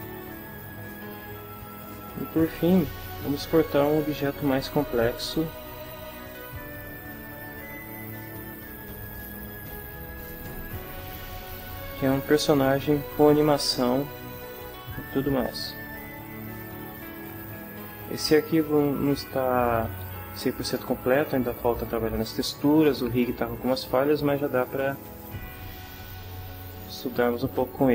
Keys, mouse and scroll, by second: 2.2 click, 4.1 click, 9.0 click, 16.1 click, 25.2-27.3 middle drag, 27.6 middle click.